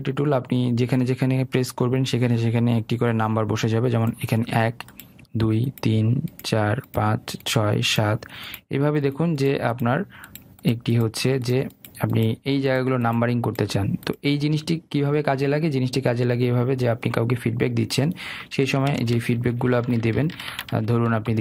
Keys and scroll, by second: 19.7 ctrl+alt+z.